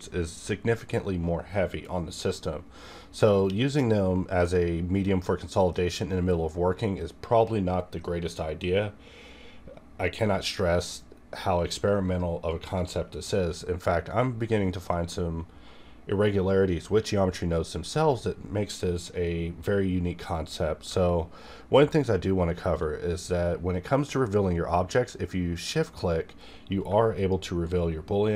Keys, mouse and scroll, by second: 27.1 shift+click, 27.2-28.3 shift+drag.